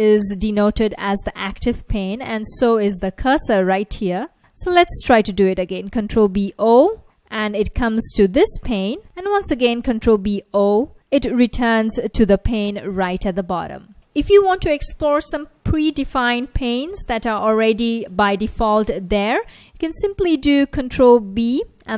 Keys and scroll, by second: 3.3 F1, 5.7 ctrl+b, 6.7 o, 8.7 F1, 10.2 ctrl+b, 10.6 0, 10.9 o, 11.6 F1, 21.7 ctrl+b.